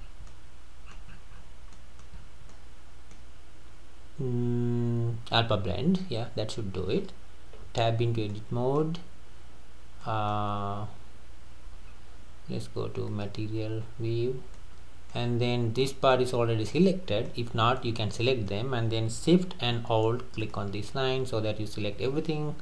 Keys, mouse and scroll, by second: 0.0 scroll down 3, 0.3-1.2 middle drag, 1.2-1.5 scroll up 9, 1.7 middle click, 2.2-2.5 scroll down 4, 2.5-5.5 middle drag, 7.7 Tab, 8.0-8.3 scroll up 2, 8.3-11.9 middle drag, 11.9-12.9 scroll up 3, 13.1 click, 13.8-14.2 scroll down 3, 14.6-20.4 middle drag, 20.4 alt+shift+click.